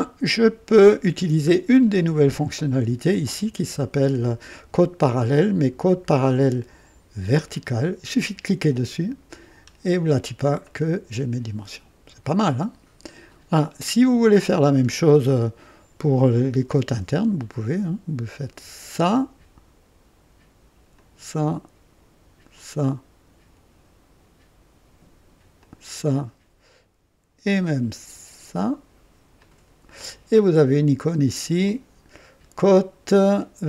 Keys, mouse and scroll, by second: 6.2 click, 8.7 click, 9.5-9.8 scroll down 1, 10.0-10.3 scroll down 1, 10.6-11.5 right drag, 14.3-14.8 scroll up 1, 15.3-16.0 right drag, 18.8 click, 20.9 click, 22.5 click, 25.6 click, 26.0-27.0 right drag, 29.3 click, 31.6 click.